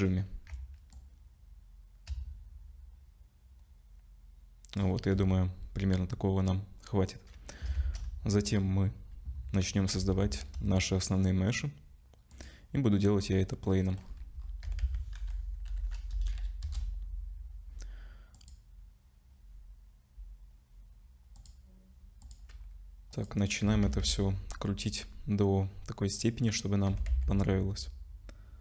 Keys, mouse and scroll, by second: 7.7 shift+a, 10.2 shift+a, 13.6 middle click, 14.0-14.6 scroll down 7, 14.6 r, 16.6 KP_0, 18.3 click, 22.2 click, 23.6 r, 26.9 r.